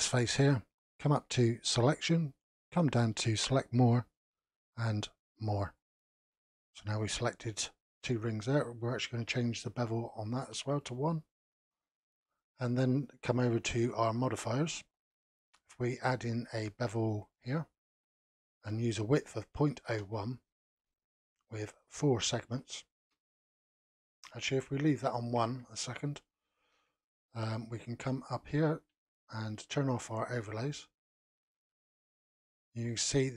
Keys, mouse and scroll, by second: 1.8-4.8 drag, 9.9-12.1 drag, 12.1-13.3 scroll down 1, 13.3 click, 14.9-17.9 drag, 18.8-21.3 drag, 21.7-25.6 drag, 25.6-26.2 scroll up 4, 26.2-27.6 shift+middle drag, 27.6-28.3 scroll up 2, 28.3-28.9 scroll up 1, 28.9-30.3 shift+middle drag, 30.3 click, 30.9 middle click, 31.8-32.3 scroll up 1, 32.3-33.3 shift+middle drag.